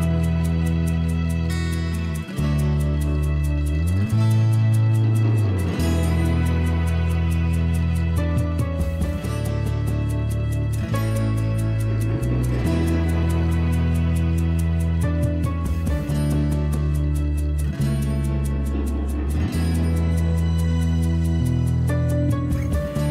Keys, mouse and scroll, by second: 4.4 F2, 9.3 F2.